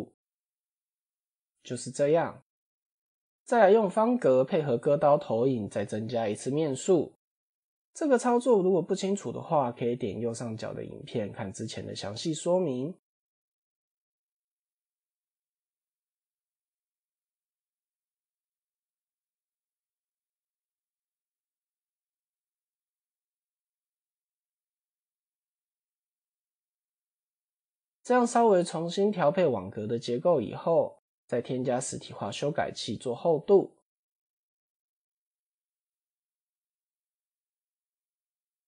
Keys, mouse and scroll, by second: 0.6 click, 1.2 Tab, 3.0 Tab, 3.4 shift+a, 6.1 s, 7.9 Tab, 8.5 right click, 10.3 click, 10.7 click, 11.2 click, 11.4 click, 11.9 click, 12.0 click, 12.2 click, 12.6 x, 14.5 Tab, 15.7 click, 17.0-20.1 drag, 20.9-21.9 drag, 22.8 shift+click, 23.4 Tab, 24.6 click, 26.3 Tab, 26.8 click, 27.2 click, 27.4 x, 28.2 click, 28.6 Tab, 29.4 1, 31.1 click, 31.4 Tab, 33.3 click, 34.5 click, 34.9-36.2 drag, 36.5-37.9 drag, 38.5 click.